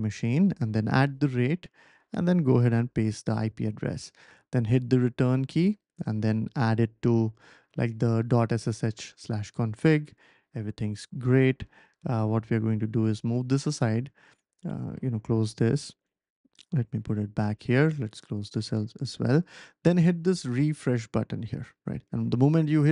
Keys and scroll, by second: 0.4 shift+2, 2.5 ctrl+v, 4.7 Return, 15.8 Return.